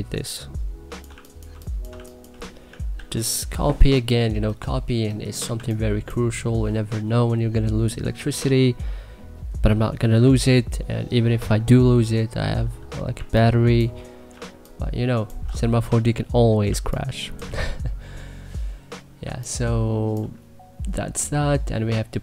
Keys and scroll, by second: 0.7-2.3 typing, 2.7 ctrl+s, 5.3 2, 12.9 1, 14.1 2.